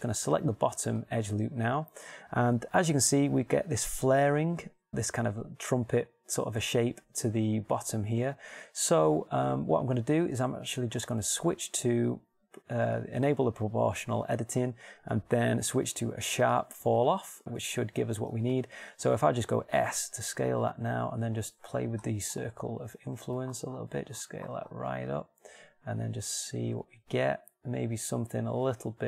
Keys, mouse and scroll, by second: 0.5 middle click, 1.3-4.3 middle drag, 12.4-14.3 middle drag, 15.0-16.9 middle drag, 17.5 middle click, 20.3 s.